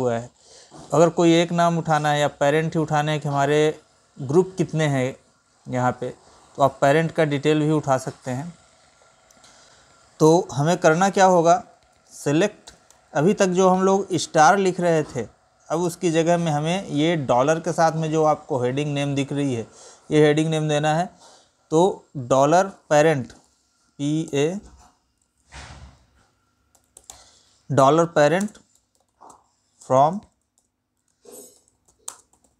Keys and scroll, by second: 10.1 ctrl+n, 15.4 space, 28.0 space, 31.7 space.